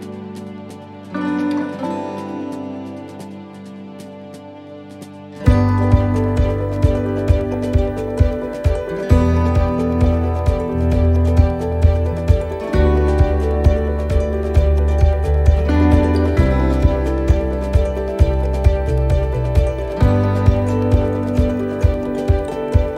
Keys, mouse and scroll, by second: 1.1 click, 5.3 click, 6.7 click, 8.6-9.4 scroll down 6, 9.9-10.5 scroll down 2, 9.9 a, 12.0 g.